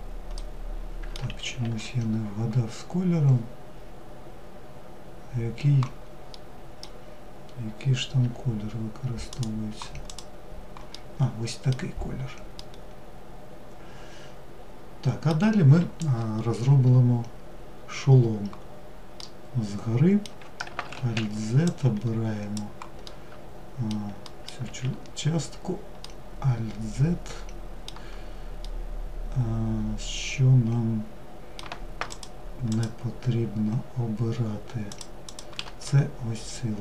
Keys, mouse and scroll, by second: 0.6 ctrl+z, 5.5-7.4 middle drag, 7.4 g, 9.2 click, 10.1-11.1 middle drag, 11.1-11.7 scroll down 2, 11.7-14.8 middle drag, 18.4-20.1 middle drag, 20.1 alt+z, 22.2-23.6 middle drag, 23.8 alt+z, 25.2-30.8 middle drag, 31.3 shift+click, 31.9 shift+click, 34.0 shift+click, 34.4 shift+click, 35.0-36.8 middle drag.